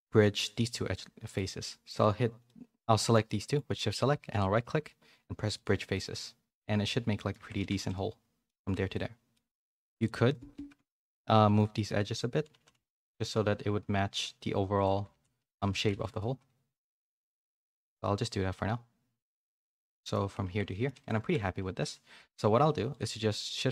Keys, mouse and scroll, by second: 0.4 shift+click, 0.9 middle click, 1.4 middle click, 2.4 middle click, 3.2 middle click, 3.7 middle click, 4.2-5.9 right drag, 5.9-7.3 middle drag, 7.5 Tab, 7.7 a, 7.8 middle click, 8.6 a, 8.7 a, 8.9 middle click, 9.5 Tab, 9.8 2, 9.9 click, 10.8 KP_1, 11.4 z, 12.5 g, 13.3 g, 14.9-16.2 typing, 19.9 middle click, 20.4 Tab, 20.6 middle click, 21.0 a, 21.2 shift+middle click, 21.8 click, 22.1 Tab, 22.3 middle click, 22.9 click, 22.9 2.